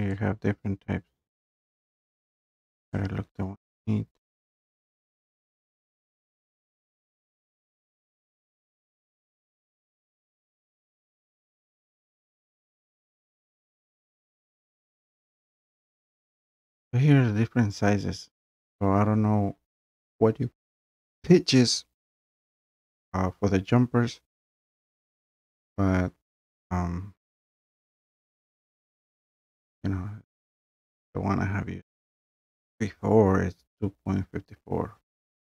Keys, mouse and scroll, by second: 0.1 scroll, 0.3 click, 1.2 click, 2.0 click, 3.0 click, 3.8 click, 5.0 click, 5.3 click, 5.4 click, 5.7 click, 5.9 click, 6.1 click, 6.3 click, 6.4 click, 6.7 click, 6.9 click, 7.2 click, 7.3 click, 12.7 click, 13.0 click, 14.6 click, 15.2 click, 15.5 click, 16.0-16.6 scroll, 16.6 scroll down 3, 16.7 scroll up 4, 16.9-18.0 scroll, 31.3 scroll, 31.5-35.5 middle drag.